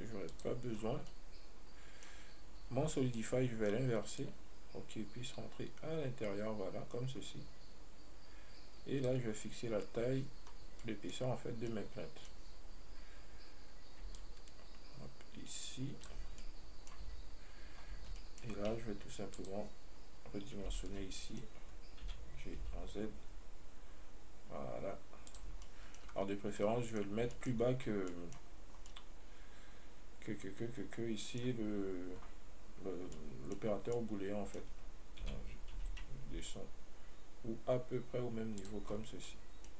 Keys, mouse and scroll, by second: 0.0 click, 0.6 click, 1.1 scroll down 2, 1.4-3.4 middle drag, 3.4-7.5 drag, 10.0 scroll up 1, 10.7-11.1 scroll up 3, 11.1-14.4 middle drag, 14.4-16.7 shift+drag, 16.7 middle click, 17.3 Tab, 18.4-19.6 shift+middle drag, 19.6 click, 21.0 alt+right click, 21.4 middle click, 22.3 g, 29.2-33.0 middle drag, 39.2-39.5 scroll.